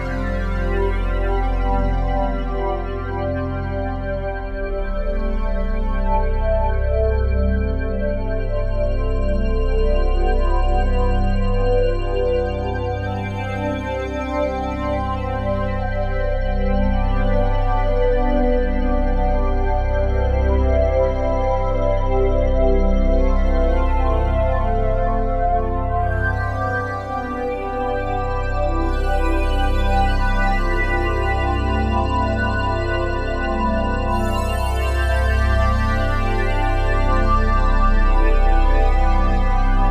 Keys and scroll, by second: 7.9 s, 12.0 a, 14.8 a.